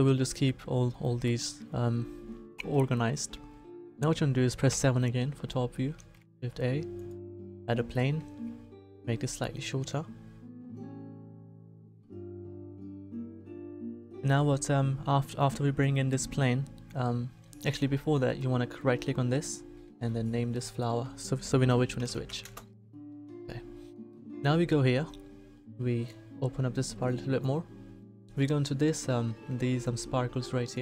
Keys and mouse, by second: 1.2-2.5 middle drag, 3.4-4.7 middle drag, 4.7 KP_7, 5.9 shift+a, 8.3 s.